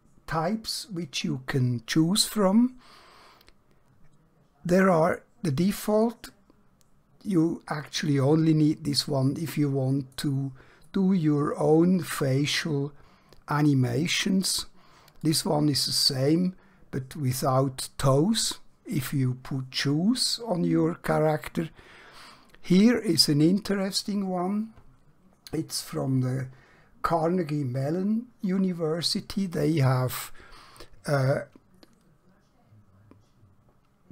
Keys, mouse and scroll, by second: 5.9 click, 9.1-10.1 middle click, 10.8-14.3 click.